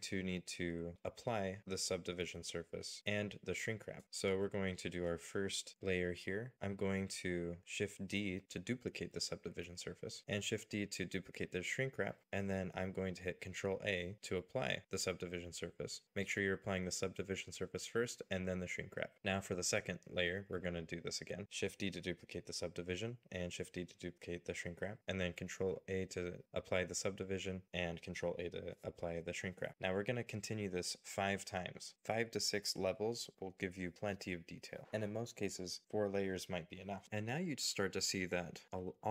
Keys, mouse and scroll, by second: 7.0 shift+d, 9.1-9.6 scroll down 1, 10.5-12.2 scroll down 1, 15.4 ctrl+a, 18.9-20.9 scroll up 1, 22.0 shift+d, 23.5 shift+d, 28.6 ctrl+a, 29.3-30.3 scroll down 1, 30.5 ctrl+a, 31.3-33.4 scroll up 1, 34.0 shift+d, 35.6 shift+d.